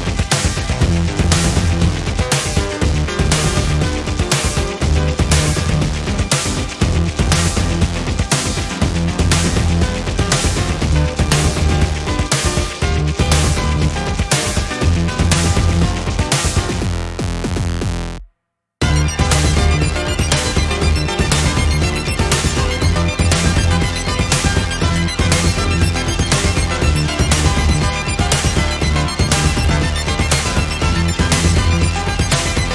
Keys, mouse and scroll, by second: 1.7-3.1 drag, 3.9-5.8 ctrl+shift+drag, 6.5-8.7 ctrl+drag, 10.3-11.9 ctrl+shift+drag, 12.6 click, 15.5-17.2 ctrl+shift+drag, 17.6 ctrl+shift+scroll up 2, 18.8 click, 19.9-21.5 ctrl+drag, 21.6-24.3 drag, 25.6-28.9 drag, 29.8 click, 30.8 click, 32.3 ctrl+d.